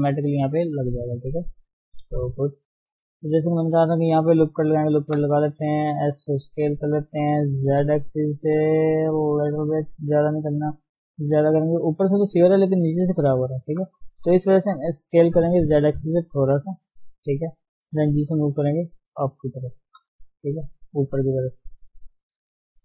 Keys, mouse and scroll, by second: 0.5-0.9 scroll down 3, 1.4 Tab, 2.1 scroll down 1, 2.2-3.0 shift+scroll up 5, 2.4 shift+middle click, 3.0 Tab, 3.4 shift+middle click, 3.7-4.7 scroll up 1, 5.3 shift+z, 5.7-6.1 scroll down 1, 6.1 s, 10.5 shift+middle click, 10.9 scroll up 1, 11.1 s, 14.0 ctrl+z, 14.8 s, 17.8 g, 19.9 shift+z, 20.2-20.5 scroll down 5, 20.5 middle click, 21.2 scroll up 1, 21.5 middle click, 22.0 Tab, 22.2 middle click.